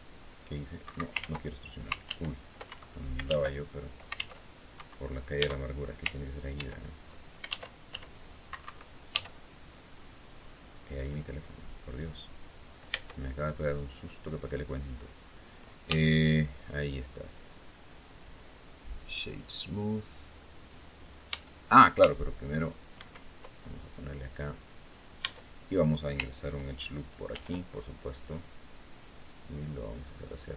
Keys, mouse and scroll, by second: 0.5 Escape, 0.9 ctrl+z, 1.8 ctrl+w, 2.4 ctrl+Escape, 3.0 alt+w, 3.9 alt+e, 4.5 alt+Escape, 5.5 Tab, 6.3 ctrl+e, 7.3 alt+w, 8.8 e, 9.6-9.9 scroll down 2, 10.2-10.7 scroll down 2, 10.7-11.5 scroll up 2, 12.6 Tab, 13.5 scroll down 2, 15.6 w, 19.0 click, 21.1 Tab, 22.7 ctrl+2, 24.2 scroll down 2, 24.9 Tab, 27.0 ctrl+r, 27.9 click.